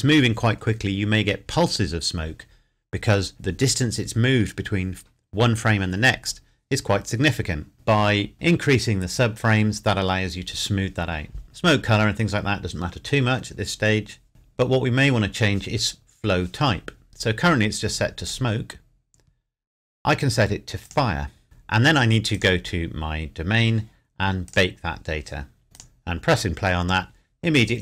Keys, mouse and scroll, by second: 11.4 click, 18.2 click, 20.8 click, 25.9 click.